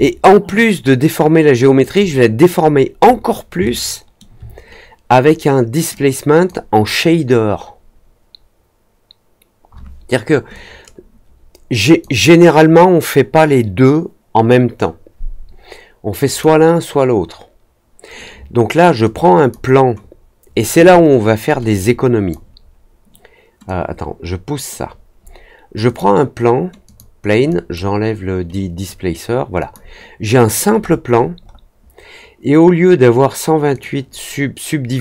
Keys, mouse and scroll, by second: 2.5-3.3 scroll down 2, 3.6-4.1 alt+middle drag, 5.9 click, 10.5-11.9 drag, 16.2 click, 19.0-19.4 drag, 21.7-22.2 drag, 23.6-24.6 drag, 25.8 click, 26.8 click, 27.4 click, 28.4 click, 29.5 click, 30.7 middle click, 31.1 middle click, 31.4 middle click, 33.7 click.